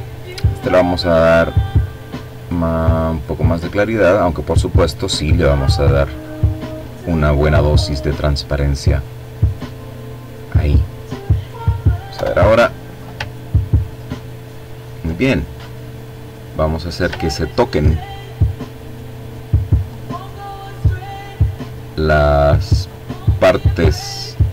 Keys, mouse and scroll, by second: 0.0-2.9 drag, 3.2-5.0 drag, 6.6 click, 8.3 click, 9.9 click, 10.6 Delete, 12.0-12.5 ctrl+scroll down 2, 12.9-13.4 ctrl+scroll up 2, 13.8 ctrl+click, 14.9 click, 15.7-16.2 ctrl+scroll up 2, 16.5-17.7 ctrl+drag, 18.3-20.1 drag, 20.7 click, 21.8 click.